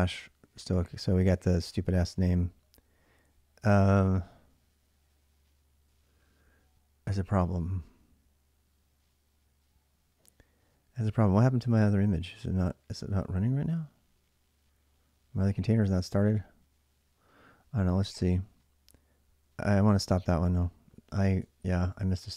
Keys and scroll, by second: 1.7-2.4 typing, 21.4 ctrl+a, 21.9 ctrl+a.